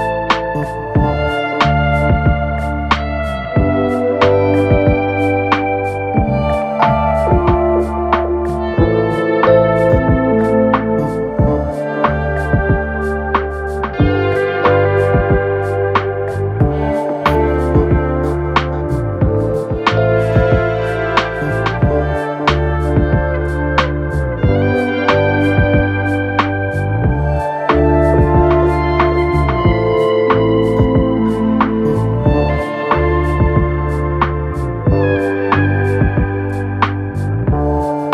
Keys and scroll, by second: 0.8 ctrl+F1, 10.1 ], 12.1 4, 20.3 p, 20.8 4, 25.9 ctrl+d, 26.1 Escape, 33.8 p.